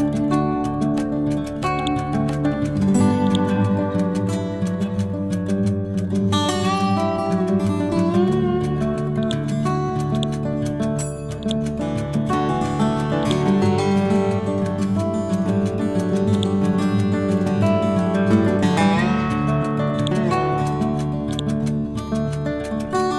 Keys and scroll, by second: 1.0 ctrl+g, 4.3 Right, 6.5 ctrl+c, 6.9 ctrl+v, 11.0 r, 13.9 Left, 15.3 Right.